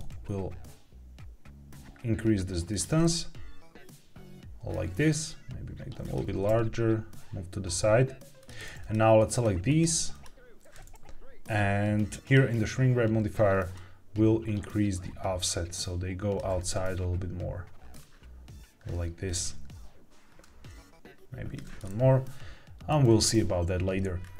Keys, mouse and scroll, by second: 2.6 click, 2.9-4.6 middle drag, 5.0 s, 6.2 click, 6.2 g, 6.4 x, 8.7 click, 9.2 click, 9.6 click, 10.0 click, 12.1 click, 13.6-16.3 shift+drag, 16.5-17.9 middle drag, 20.3-21.5 shift+drag, 21.7-22.8 middle drag, 22.9-23.3 scroll down 3, 24.1-24.3 scroll up 1.